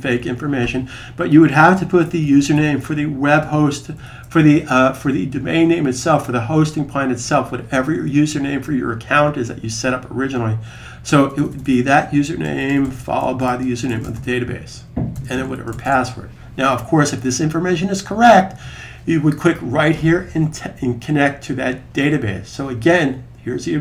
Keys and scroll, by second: 2.1-2.4 typing, 3.8 typing, 12.2-14.0 typing.